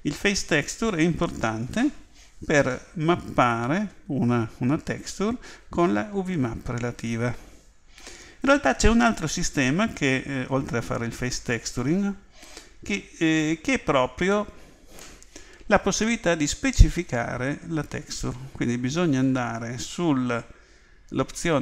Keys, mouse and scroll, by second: 11.6 click.